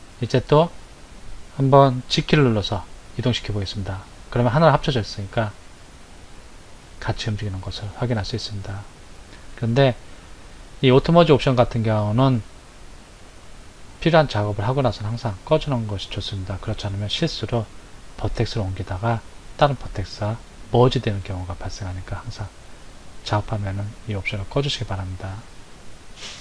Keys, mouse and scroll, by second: 2.7 g, 23.6 click.